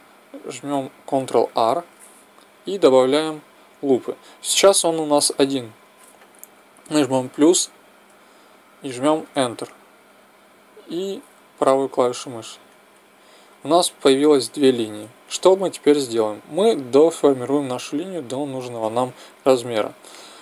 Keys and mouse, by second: 1.4 ctrl+r, 15.6-20.3 right drag.